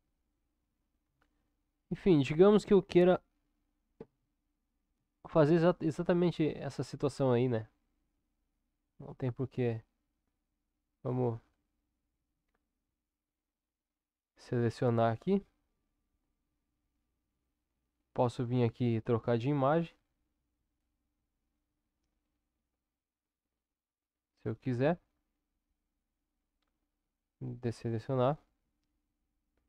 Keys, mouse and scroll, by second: 1.0 ctrl+KP_7, 6.0 Tab, 6.6 Tab, 9.0-9.6 drag.